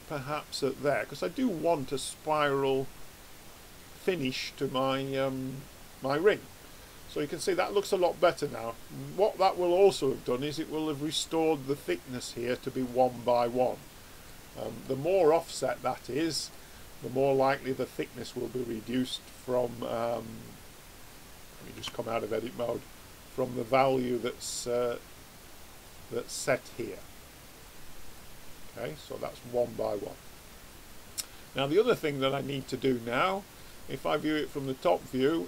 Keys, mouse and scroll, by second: 4.7-6.9 middle drag, 12.8 middle click, 13.2 middle click, 14.3 middle click, 21.8 Tab, 22.4 click, 25.5 click, 27.5 click, 30.4 click, 31.4 right click, 32.2-33.3 middle drag, 33.5 click.